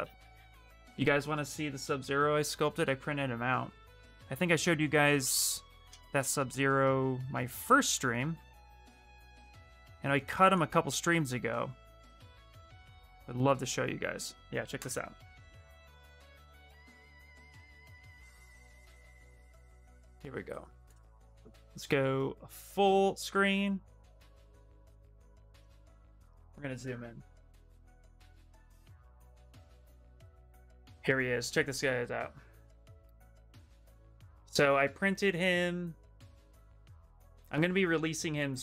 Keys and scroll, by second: 7.3 ctrl+z, 8.7 e.